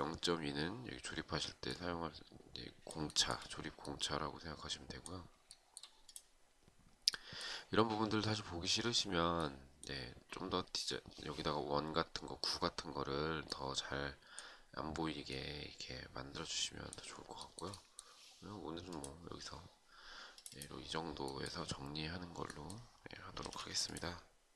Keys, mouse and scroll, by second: 2.6 shift+right click, 5.0 shift+right click, 16.9 shift+right click, 22.9 space, 24.1 shift+click, 24.4-24.5 shift+scroll down 1.